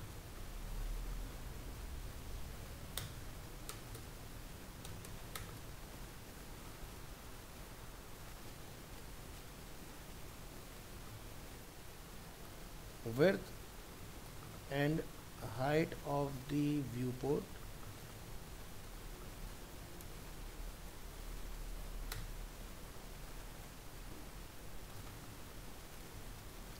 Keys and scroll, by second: 1.9 ctrl+s, 5.6 ctrl+s, 11.2 ctrl+s.